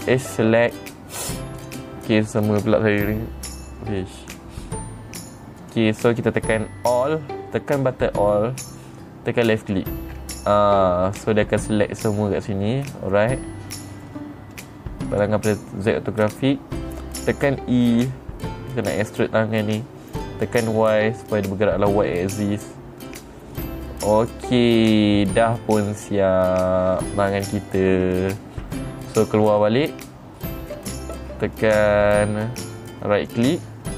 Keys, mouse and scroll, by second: 0.6 click, 2.1 click, 6.1 click, 8.3 middle click, 10.1 alt+click, 11.7 middle click, 13.3-14.5 middle drag, 13.4 scroll up 1, 15.6 click, 16.7-18.1 scroll down 3, 18.3 e, 23.6 click, 24.1-28.1 middle drag, 30.2 Tab, 31.2 middle click, 31.3 scroll down 1, 32.1 right click, 33.7 right click.